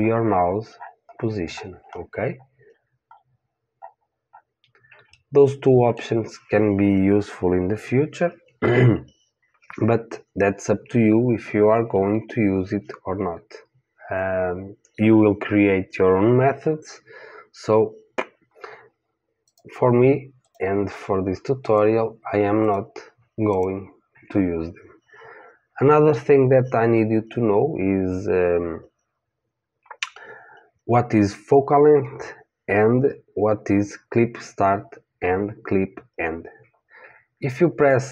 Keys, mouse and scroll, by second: 2.2-2.7 scroll up 1, 2.7-18.6 middle drag, 19.5-23.6 drag.